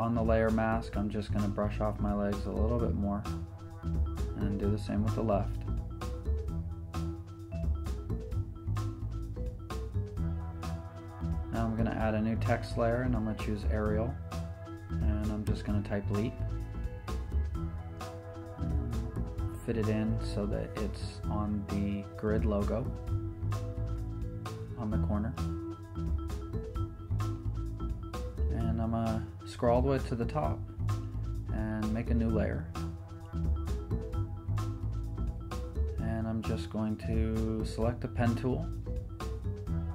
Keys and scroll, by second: 14.6 t, 16.0 t, 16.7 t, 18.2-19.1 typing, 19.9 Left, 21.5 super+Return, 21.9 t, 23.6-24.5 typing, 25.9 v, 26.6 t, 28.6 v, 31.0 shift+super+n, 32.7 Return.